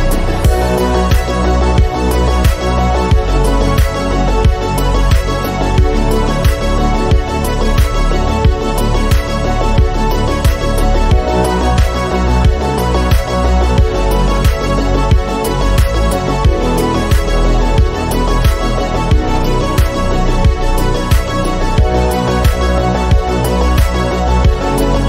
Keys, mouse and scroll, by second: 0.9 click, 1.6 g, 5.6 shift+middle click, 6.2 r, 9.6 KP_1, 10.3 r, 11.8-13.1 drag, 14.8 KP_7, 15.8 r, 16.4 g, 20.6 r, 21.7 g.